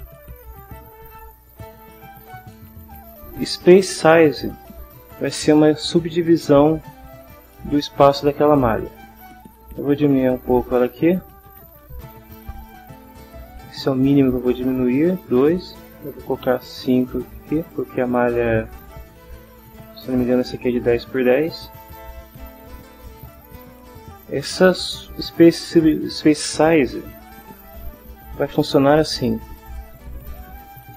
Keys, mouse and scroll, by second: 10.5 click, 11.2 click, 12.0 click, 12.4 click, 16.4 5, 17.3 click, 29.2 m, 29.5 y, 30.2 Down.